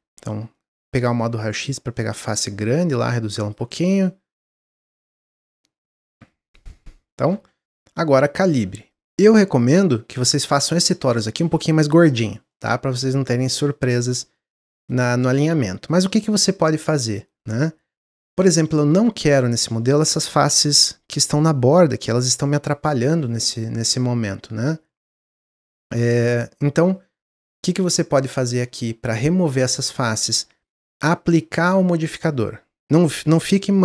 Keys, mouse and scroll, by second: 0.1 click, 0.5-1.6 middle drag, 1.6 click, 1.9 middle click, 2.6 s, 4.0-5.5 middle drag, 5.5 s, 8.8 middle click, 9.6 click, 9.9-10.4 middle drag, 10.4 click, 10.8-16.2 middle drag, 16.2 click, 16.9-21.9 middle drag, 22.3-31.6 middle drag.